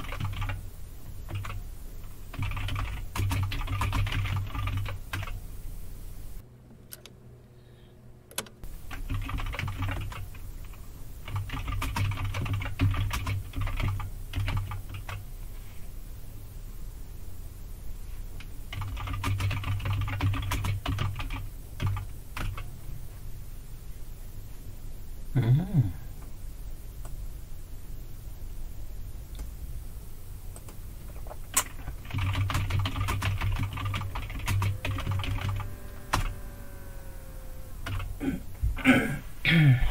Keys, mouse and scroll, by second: 0.0-0.8 typing, 1.3 Return, 2.1-5.2 typing, 8.9-15.0 typing, 18.5-21.8 typing, 22.4 Return, 27.0-29.4 drag, 30.5 click, 31.9-35.9 typing, 36.1 Return, 37.6-38.3 typing.